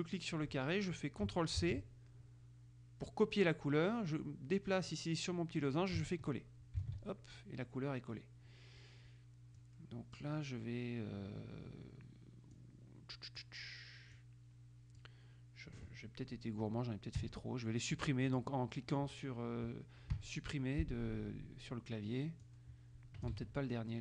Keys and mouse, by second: 1.7 ctrl+c, 4.9 click, 7.0 ctrl+v, 9.7-10.9 drag, 12.7-14.1 drag, 14.3-15.7 drag, 17.3 Delete, 18.5 click, 20.3 Delete, 22.6-23.9 drag, 23.5 ctrl+z.